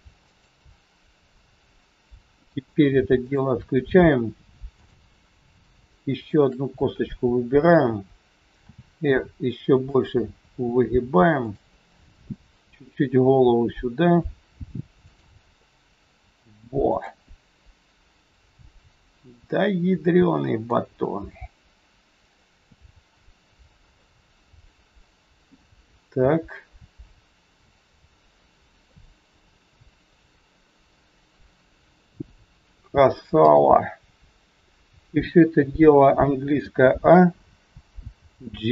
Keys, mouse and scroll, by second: 3.1 shift+click, 8.7 shift+click, 8.7 r, 11.3 click, 12.1 r, 15.5 middle click, 17.6-18.6 scroll up 2, 19.0-19.4 scroll down 1, 19.4 middle click, 21.0 middle click, 22.8-24.6 scroll down 1, 24.6 middle click, 25.6 scroll down 2, 28.8 middle click, 33.3 KP_3, 33.9 scroll down 1, 34.4-34.8 scroll down 1, 36.5 a.